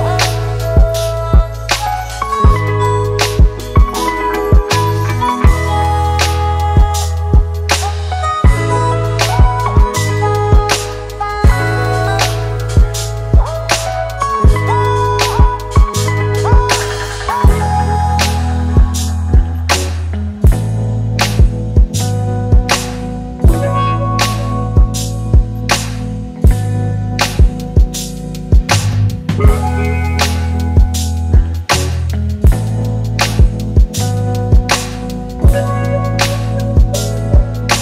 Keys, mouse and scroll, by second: 2.5 alt+click, 10.6 right click, 12.1 double click, 19.1 right click, 20.5 double click, 22.1-23.7 typing, 24.1 double click.